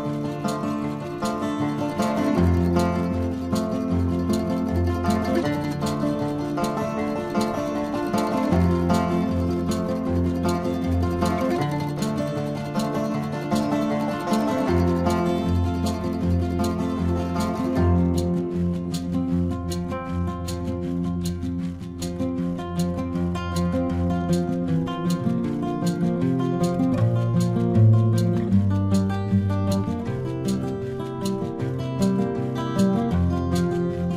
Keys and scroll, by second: 2.5 space, 3.9 ctrl+-, 4.3 space, 10.5 ctrl+alt+z, 14.1 space, 15.3 ctrl+alt+z, 17.4 ctrl+alt+z, 18.1 space, 20.7 ctrl+alt+z, 21.6 space, 22.3 ctrl+alt+z, 22.7 ctrl+alt+z, 23.5 space, 24.4 space, 27.9 ctrl+alt+z, 29.6 space, 30.2 ctrl+alt+z, 33.4 ctrl+alt+z, 33.8 space.